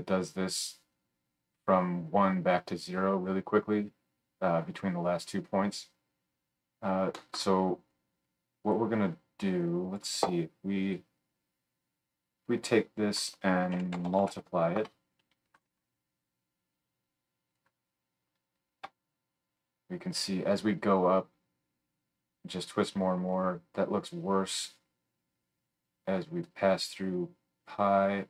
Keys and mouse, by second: 10.9-12.6 drag, 15.7-16.7 drag.